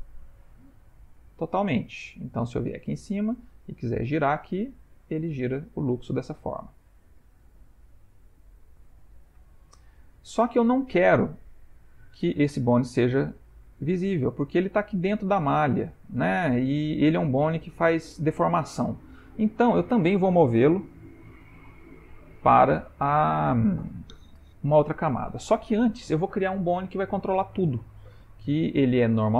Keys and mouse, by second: 2.3 middle click, 2.8 ctrl+middle click, 3.2 middle click, 4.0 r, 8.2 middle click, 9.1 ctrl+middle click, 9.5 shift+middle click, 10.2 middle click, 12.7-13.2 ctrl+middle click, 13.6 middle click, 14.7 middle click, 15.7 middle click, 17.5-17.8 ctrl+middle click, 28.2 middle click, 29.2 ctrl+middle click.